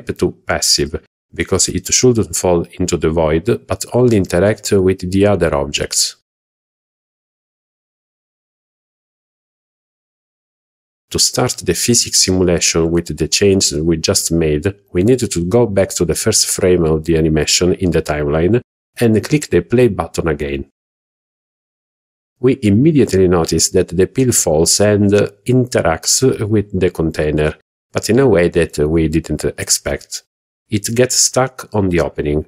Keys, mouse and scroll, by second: 4.9 click, 14.6-15.9 drag, 17.6 click, 22.7 click, 24.9-25.3 middle drag, 25.6-26.1 scroll up 2, 26.4-26.8 shift+middle drag, 26.9 scroll down 1, 27.0-27.7 scroll up 3, 27.8-28.2 middle drag, 30.5 click, 31.2 scroll down 2, 31.8 shift+middle drag.